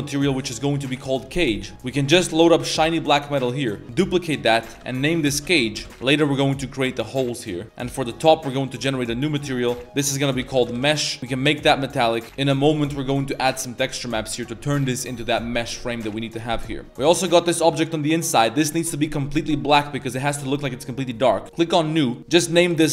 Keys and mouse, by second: 1.7-2.8 drag, 3.9 click, 4.3-5.8 drag, 7.3 middle click, 7.8 click, 8.6 click, 9.4-10.8 shift+drag, 11.2 click, 13.0 middle click, 14.9 middle click, 15.8 middle click, 16.3 middle click, 17.0 right click, 17.4 g, 21.5 click, 22.1 click.